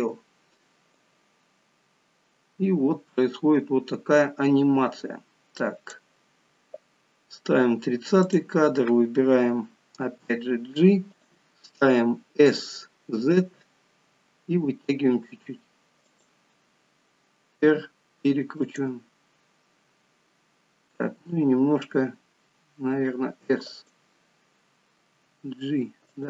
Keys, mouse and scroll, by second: 0.9 click, 8.1 click, 9.9 g, 17.7 r.